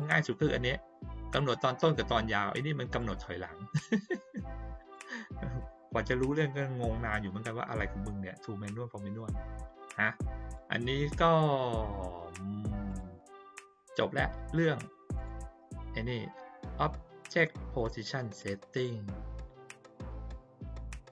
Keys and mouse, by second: 0.3 click, 2.9 click, 4.9 click, 9.9-10.5 drag, 12.8 click, 15.1 click, 17.4-18.3 drag.